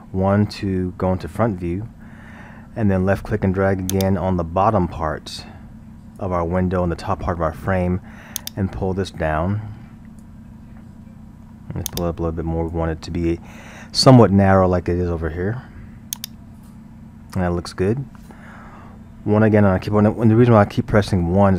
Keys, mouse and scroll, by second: 4.0 click, 8.4-10.5 drag, 10.5-11.9 middle drag, 11.9-14.9 drag, 16.1-19.2 drag, 19.3 KP_1.